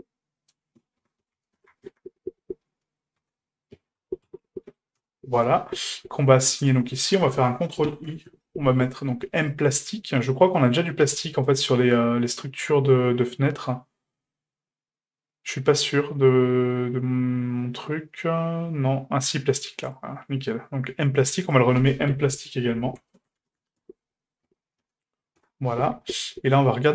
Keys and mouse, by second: 6.6 click, 7.9 ctrl+i, 9.4 click, 10.6-19.9 drag, 21.5-26.1 drag.